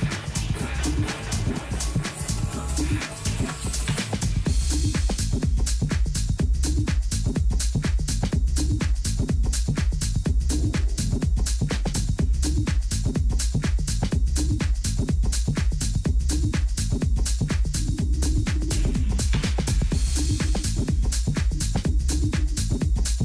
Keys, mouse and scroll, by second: 4.8-6.4 middle drag, 6.4-8.3 drag, 10.5-12.7 middle drag, 14.5-16.4 drag, 16.8-18.6 drag, 22.9-23.2 drag.